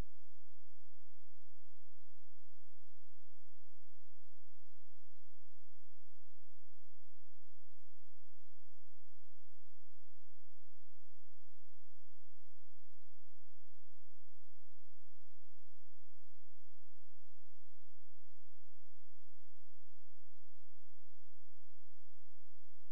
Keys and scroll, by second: 2.7 space, 14.8 space.